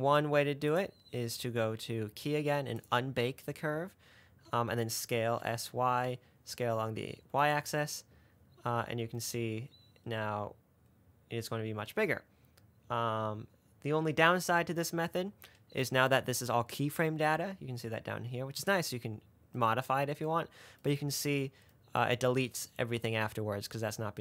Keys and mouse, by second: 1.1-3.2 drag, 4.7 s, 8.9 space, 15.0 space, 20.9 middle click.